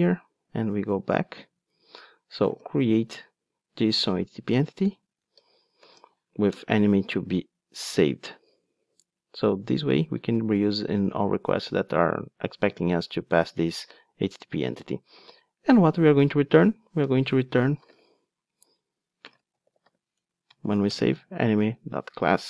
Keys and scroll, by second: 20.2 Return.